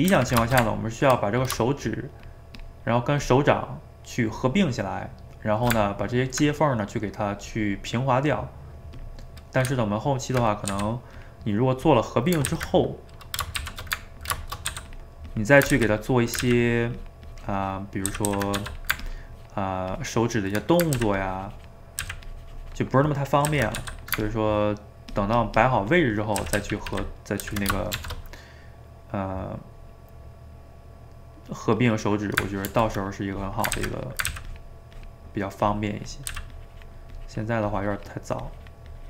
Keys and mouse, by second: 0.0 middle click, 0.2 a, 0.3 a, 0.5-1.5 ctrl+shift+middle drag, 1.5 click, 1.7 shift+click, 1.9 shift+click, 2.6 shift+click, 2.8 shift+middle click, 3.3 shift+click, 5.5 shift+right click, 5.7-9.0 ctrl+middle drag, 9.0 click, 9.7 Tab, 10.7 f, 11.4 middle click, 11.9 click, 12.5 ctrl+z, 13.6 shift+c, 14.0 ctrl+middle click, 14.7 f, 15.3 click, 15.8 ctrl+z, 16.0 click, 16.4 ctrl+z, 16.6-18.1 ctrl+drag, 18.1 ctrl+z, 18.3 ctrl+z, 18.6 f, 19.1-20.6 ctrl+drag, 20.6 middle click, 20.9 ctrl+z, 21.2 ctrl+click, 22.1 ctrl+z, 22.3-23.5 ctrl+drag, 23.5 ctrl+z, 23.8 f, 24.2-26.4 ctrl+drag, 26.4 ctrl+z, 26.6 ctrl+z, 27.5 ctrl+z, 27.9 shift+r, 32.8 ctrl+r, 33.3 click, 33.8 ctrl+z, 34.0 click, 34.3 ctrl+z, 34.5-36.3 ctrl+drag, 36.3 ctrl+z, 36.6-39.0 ctrl+drag.